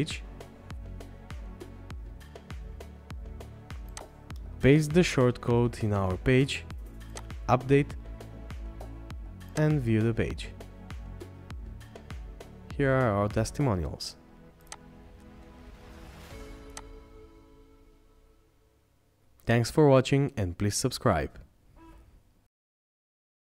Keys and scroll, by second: 12.0 scroll down 1.